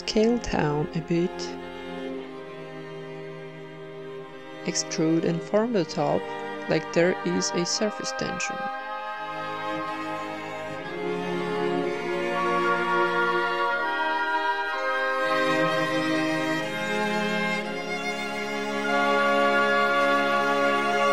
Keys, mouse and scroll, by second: 0.4 Tab, 0.6-2.8 middle drag, 3.0 z, 4.2 Tab, 4.8-5.8 typing, 5.3-6.8 right drag, 7.0 click, 8.0 o, 8.2 s, 9.9 a, 10.3-11.3 right drag, 10.5 Tab, 10.9-13.1 typing, 11.4 Tab, 12.4 ctrl+n, 14.2-15.9 drag, 14.9 ctrl+r, 16.0 a, 16.2-17.6 drag, 16.7 n, 17.0 alt+s, 17.9 s, 18.4 e, 18.6 s, 19.9 alt+s.